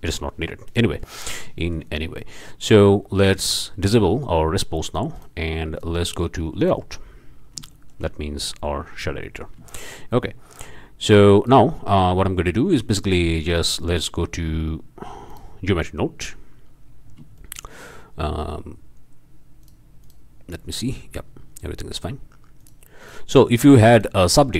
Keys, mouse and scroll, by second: 0.8-1.2 drag, 1.3 scroll up 1, 1.6 shift+click, 1.9-2.3 shift+scroll down 1, 3.4-3.7 drag, 4.2-4.5 scroll down 2, 5.1 click, 6.6 click, 8.1 shift+click, 8.8 drag, 9.6 shift+click, 9.7 shift+click, 11.1-11.7 drag, 11.9 scroll down 1, 13.5-15.3 drag, 15.6-16.8 drag, 16.8-17.3 middle drag, 17.3-17.9 shift+drag, 18.5 middle click, 19.6 click, 20.0 click, 20.6 middle click, 21.2 middle click, 22.6 drag, 23.0 click, 23.5 drag, 23.9 click, 24.4 scroll up 3.